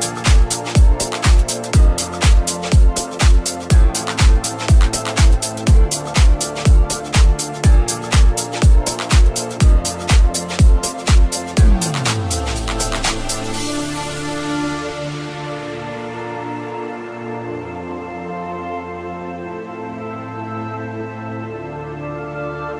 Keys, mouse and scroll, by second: 2.6 right click, 5.3 g.